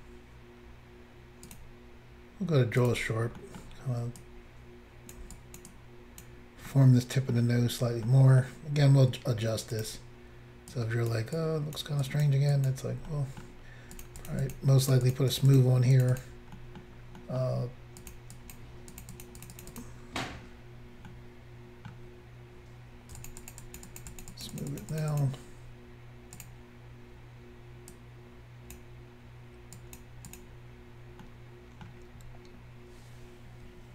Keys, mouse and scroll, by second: 1.5 click, 1.6 click, 2.9 click, 2.9 click, 3.5 middle click, 3.6 middle click, 4.2 click, 5.4 click, 5.8 click, 6.7 middle click, 8.1 middle click, 9.8 click, 10.8 click, 11.4 click, 12.1 click, 12.6 click, 12.7 click, 13.1 middle click, 14.0 click, 14.1 click, 14.3 click, 14.3 double click, 14.5 double click, 14.6 double click, 14.9 double click, 15.1 double click, 15.2 double click, 15.4 double click, 15.4 double click, 15.6 double click, 15.6 double click, 16.0 double click, 16.1 double click, 16.2 double click, 16.3 double click, 16.6 middle click, 17.2 middle click, 18.0 click, 18.5 double click, 19.1 double click, 19.1 double click, 19.3 double click, 19.4 double click, 19.5 double click, 19.6 double click, 19.6 double click, 19.8 double click, 21.0 double click, 21.1 middle click, 23.3 shift+click, 23.5 shift+double click, 23.7 shift+click, 23.8 shift+click, 23.9 shift+click, 24.0 shift+double click, 24.1 shift+click, 24.2 shift+click, 24.4 shift+click, 24.5 shift+double click, 24.6 shift+click, 24.7 shift+click, 24.8 shift+click, 24.9 shift+double click, 25.0 shift+click, 25.1 shift+click, 25.2 shift+click, 25.3 shift+double click, 26.4 click, 26.5 click, 29.8 click, 30.3 click, 30.4 click, 31.3 middle click, 32.2-33.1 scroll down 1, 33.1 scroll down 1.